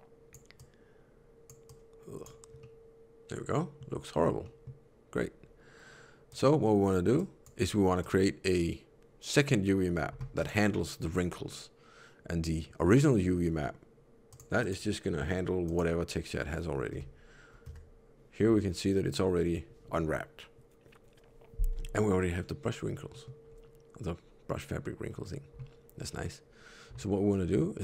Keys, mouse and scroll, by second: 0.5 click, 2.5 middle click, 4.3 middle click, 6.2 click, 7.0 click, 14.2 click, 14.5 click, 16.8 Tab, 17.6 a, 18.3 scroll down 6, 20.4 scroll up 1, 23.0 middle click, 23.4 scroll up 1, 25.0-25.5 scroll down 1, 27.7 click.